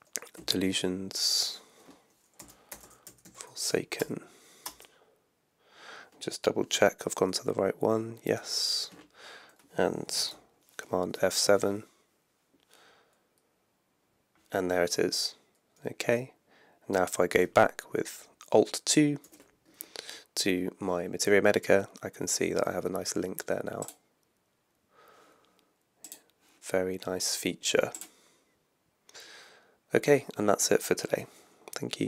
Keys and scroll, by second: 0.3 Left, 2.2-3.8 typing, 4.0 Return, 7.2 alt+2, 8.3 alt+1, 11.1 super+F7, 19.2 alt+2.